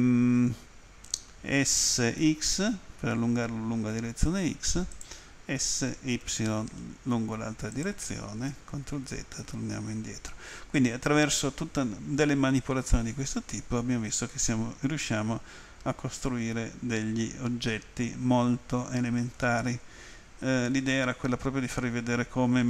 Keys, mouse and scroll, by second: 2.0-2.7 typing, 5.0 click, 5.6 s, 6.3 y, 7.8 click, 14.4 middle click, 16.4 middle click, 16.6 middle click, 16.7 middle click, 18.2 middle click, 20.2 scroll down 1, 21.0 middle click.